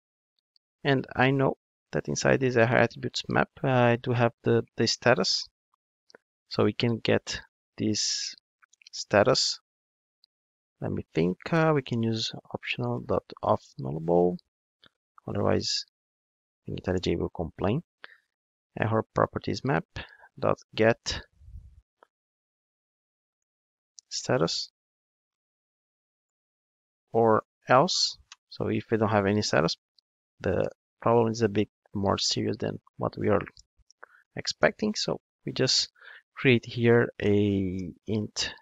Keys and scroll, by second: 1.3 Tab, 15.3 alt+Return, 16.9 Return, 28.0 Return.